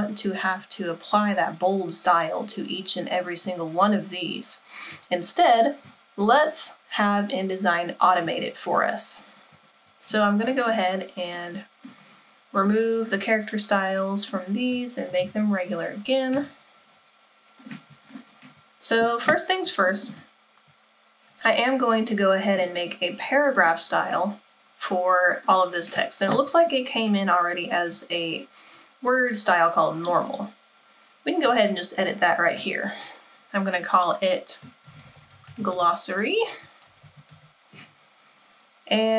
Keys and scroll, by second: 14.9-16.4 typing, 34.7-37.5 typing.